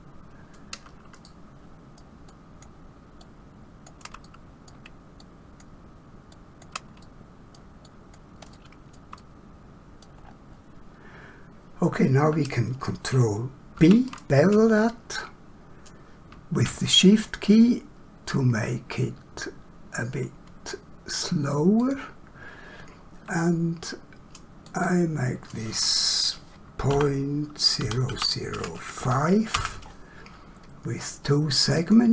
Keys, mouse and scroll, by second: 4.3 middle click, 9.2 middle click, 10.3 scroll up 1, 13.7 ctrl+b, 24.7 click, 27.8 0, 28.9 5, 29.6 Return, 31.8 click.